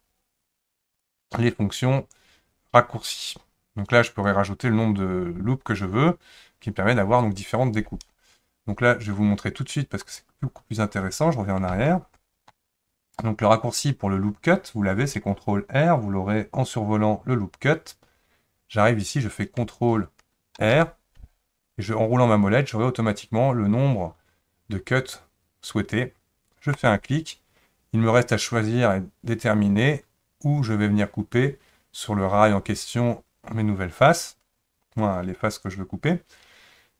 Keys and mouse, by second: 1.0-4.3 drag, 10.1 click, 11.7 ctrl+z, 20.6 ctrl+r.